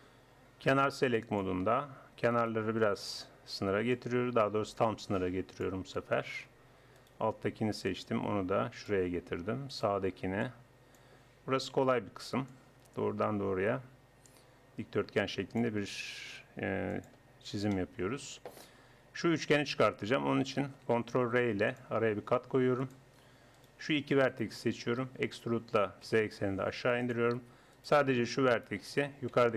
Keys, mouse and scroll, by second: 1.3-2.8 drag, 2.4 right click, 2.8 middle click, 3.1 right click, 4.0-5.5 drag, 7.0 right click, 7.9 middle click, 8.7-9.8 drag, 9.8 right click, 10.4-11.6 middle drag, 11.6 click, 11.8 middle click, 12.2-14.2 drag, 12.5-13.6 right drag, 17.0-18.8 drag, 21.2 ctrl+r, 23.6-26.2 drag, 25.2 e, 27.7-29.5 drag.